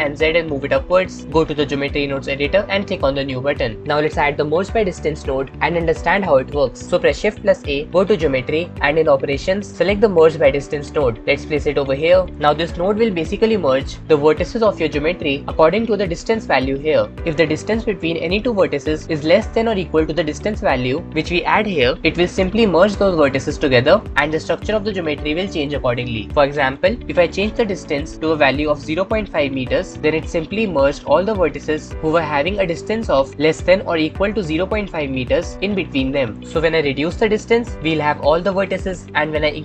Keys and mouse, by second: 4.0-5.5 drag, 7.7 shift+a, 12.6-14.0 shift+middle drag, 21.1-24.1 drag, 27.9-29.7 drag, 36.8-39.6 drag.